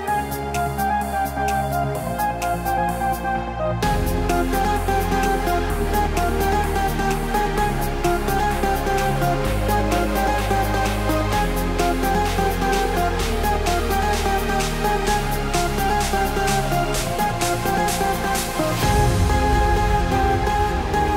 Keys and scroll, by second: 19.8 alt+BackSpace, 20.5 alt+BackSpace.